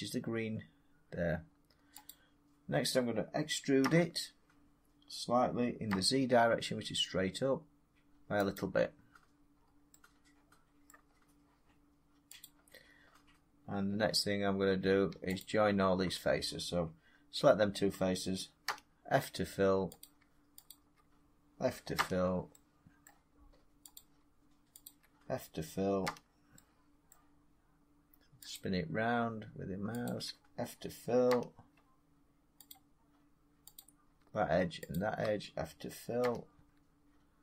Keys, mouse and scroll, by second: 1.9-7.0 drag, 3.7 e, 5.8 z, 8.4 click, 9.4-9.8 scroll, 9.8 middle click, 11.0 middle click, 11.0 middle click, 12.3 click, 15.3 shift+click, 18.5 f, 19.9 click, 20.6 shift+click, 21.8 f, 22.9 middle click, 23.8 click, 24.7 shift+click, 25.9 f, 27.0 middle click, 28.4 click, 29.9 shift+click, 31.2 f, 32.6 click, 33.6 click, 34.8 shift+click, 36.1 f.